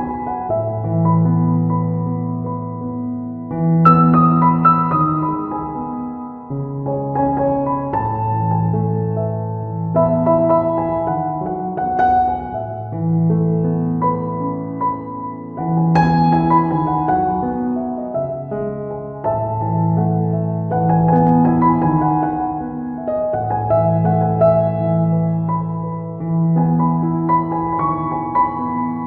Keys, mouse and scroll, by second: 0.5 click, 0.9 click, 2.4 right click, 2.7 click, 3.9 click, 4.1 right click, 4.5 click, 6.7 click, 7.2 middle click, 7.7 shift+middle click, 8.2 right click, 8.6 click, 11.0 middle click, 11.7 right click, 12.3 click, 13.6 click, 14.6 middle click, 15.0 middle click, 15.4 right click, 16.0 click, 19.4 middle click, 20.0 ctrl+right click, 20.4 right click, 20.8-23.6 click, 25.2 click, 26.2 right click, 26.6 click, 26.7 click, 27.2 right click, 27.6 click, 27.7 click, 28.7 click, 28.9 middle click.